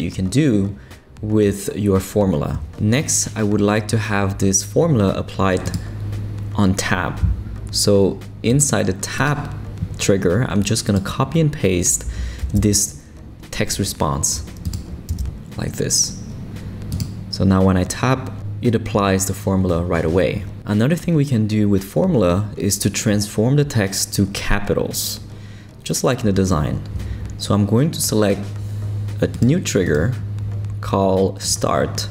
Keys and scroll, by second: 12.4 super+c, 15.1 super+v.